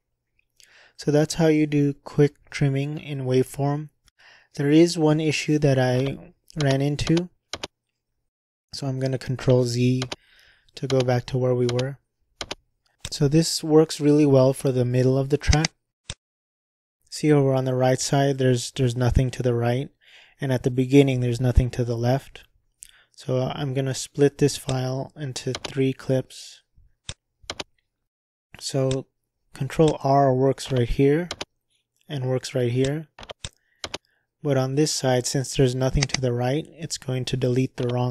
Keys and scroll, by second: 6.6 ctrl+z, 7.0 ctrl+z, 7.5 ctrl+z, 10.0 ctrl+z, 10.9 ctrl+z, 11.6 ctrl+z, 12.4 ctrl+z, 25.5 /, 27.5 /, 31.3 ctrl+r, 33.9 ctrl+r.